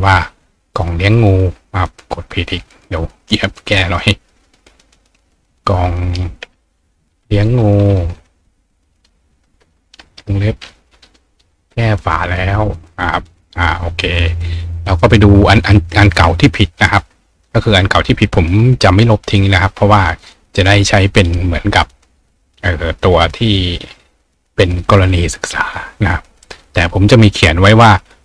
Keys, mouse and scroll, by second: 2.7 click, 4.2 click, 5.5 click, 12.9 click, 17.1-18.3 scroll down 2, 18.8-19.3 scroll down 2, 19.8 scroll down 1, 20.3-21.4 scroll down 1, 21.4-23.0 scroll down 1, 23.9-24.4 scroll down 2, 24.4-25.0 scroll down 1, 25.0-25.9 scroll up 2, 25.9 scroll down 2.